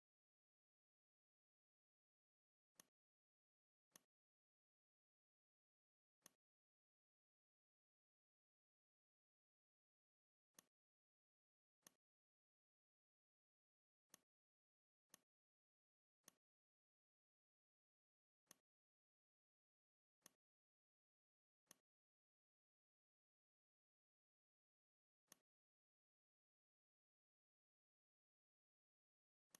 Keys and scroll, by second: 1.1 ctrl+g, 4.9 \.